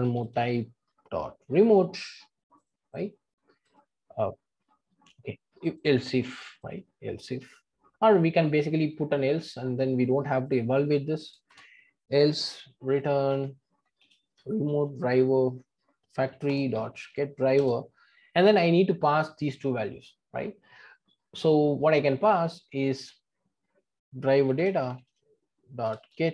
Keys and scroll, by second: 13.3 Return, 16.5 Return, 25.9 Return.